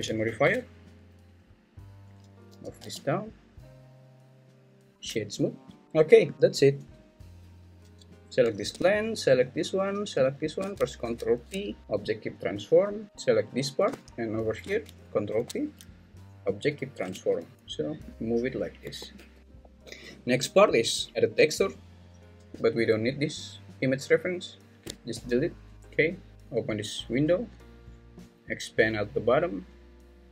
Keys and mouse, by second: 0.3 ctrl+2, 2.5 g, 2.8 z, 4.9 Tab, 5.8 right click, 5.8 `, 11.0 ctrl+p, 14.3 shift+click, 15.3 ctrl+p, 17.1 `, 18.1 g, 18.9 Escape, 19.1 `, 25.1 x, 25.7 `, 26.3-27.7 drag, 26.3 `.